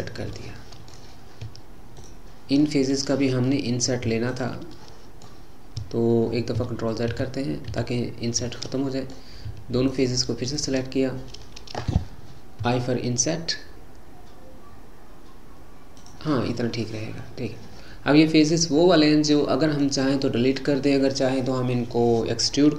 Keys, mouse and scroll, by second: 2.0 shift+click, 2.7-4.3 middle drag, 4.3 shift+click, 4.8-6.6 middle drag, 6.6 ctrl+z, 7.2 ctrl+z, 7.7 ctrl+z, 8.5-9.9 middle drag, 9.9 shift+click, 10.5 shift+click, 16.4-19.5 middle drag, 20.2-22.7 middle drag.